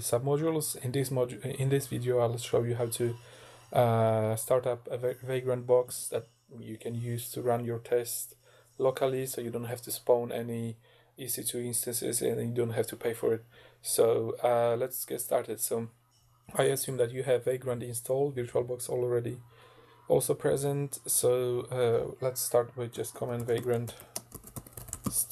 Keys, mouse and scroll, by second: 22.7-25.3 typing.